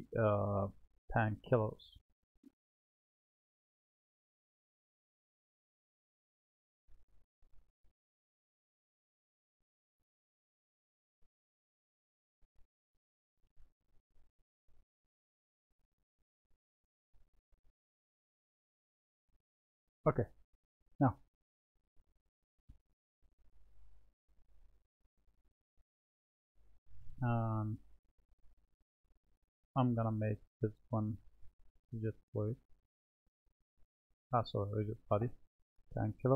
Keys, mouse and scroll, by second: 0.9 click, 4.2 click, 7.8 s, 11.1 click, 13.0-13.8 shift+middle drag, 15.2-16.2 shift+middle drag, 17.8 s, 21.2-22.0 middle drag, 23.5 click, 25.2 click, 27.7 click, 31.5-36.0 drag.